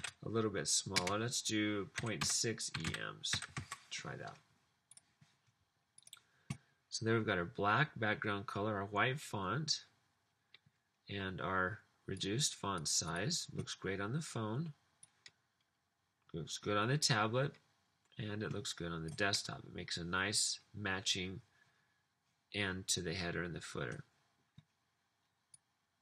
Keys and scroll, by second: 0.9-4.2 typing.